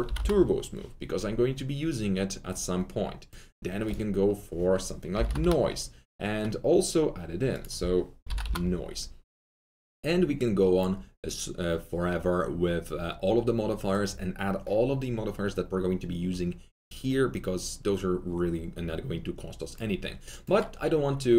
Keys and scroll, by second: 0.0 typing, 4.8-5.7 typing, 7.9-8.9 typing.